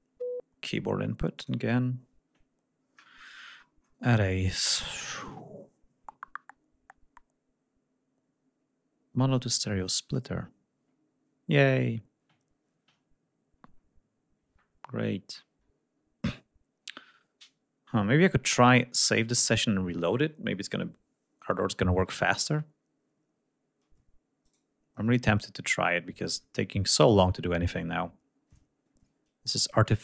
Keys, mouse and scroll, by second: 1.1 right click, 2.7-3.6 scroll down 2, 9.6 click, 24.2 right click, 29.8 click.